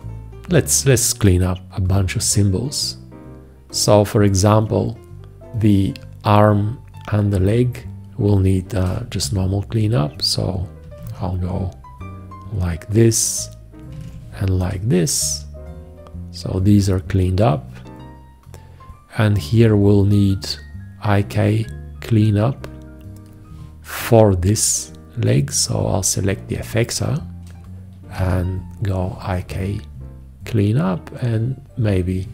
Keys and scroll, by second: 11.0 alt+q, 14.1 alt+q, 28.2 alt+q.